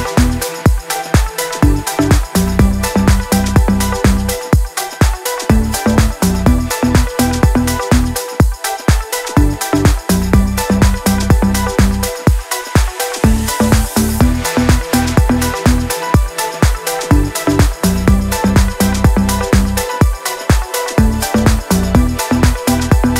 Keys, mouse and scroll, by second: 0.0 click, 1.6 ctrl+shift+a, 15.8-17.0 scroll down 1, 17.0-23.1 drag.